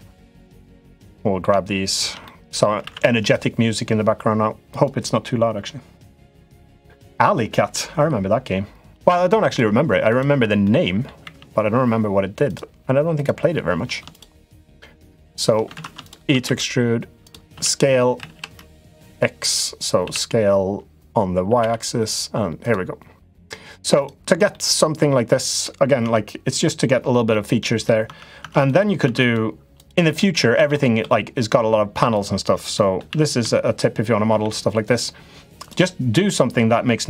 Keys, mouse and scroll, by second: 0.7 middle click, 2.0 middle click, 2.6 alt+e, 6.3 middle click, 9.9 shift+click, 10.4 middle click, 11.0 e, 13.9 click, 15.5 ctrl+z, 15.8 click, 16.2 e, 17.3 s, 19.8 s, 23.0 click, 24.4 middle click, 25.5 middle click, 25.8 Tab, 27.0 middle click, 27.8 Tab, 28.1 Tab, 28.4 click, 28.8 Tab, 29.0 click, 29.6 click, 30.3 shift+d, 30.7 s, 32.6 middle click, 32.8 s, 36.1 click.